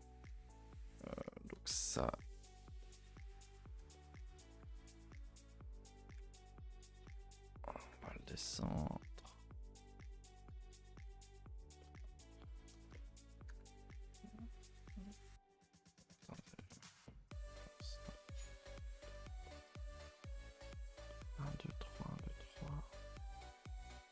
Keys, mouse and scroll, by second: 0.2-1.5 middle drag, 1.5 g, 2.8-4.1 middle drag, 4.1 scroll up 1, 4.5 g, 6.3 ctrl+z, 6.7 click, 7.0 ctrl+z, 7.8 g, 9.4 s, 11.8-13.5 middle drag, 13.5 g, 15.1-16.2 middle drag, 16.2 s, 18.1-19.8 middle drag, 19.8 a, 19.9 a, 20.5-24.1 middle drag.